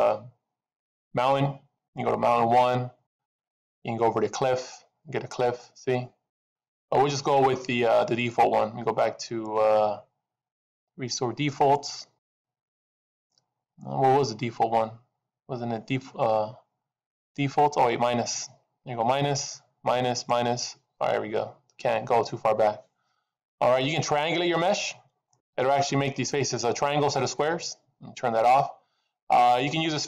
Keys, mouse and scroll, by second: 3.0 click, 4.9 click, 8.2 click, 9.2 click, 12.1 click, 18.1 click, 24.7 click, 25.1-26.0 scroll up 7, 28.4 click, 29.1-30.0 scroll down 3.